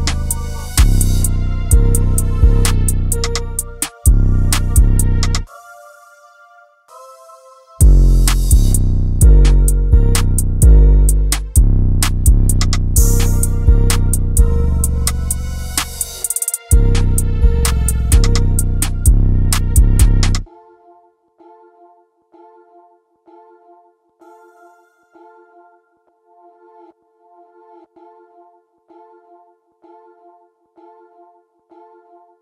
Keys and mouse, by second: 1.2 ctrl+z, 2.8-3.4 shift+drag, 4.5 KP_1, 5.3 KP_3, 14.0 click, 16.8-17.4 drag, 21.2 click, 21.9-22.4 drag, 23.3-24.1 middle drag, 26.0 click, 29.3-29.7 middle drag, 30.5 click, 31.8 click.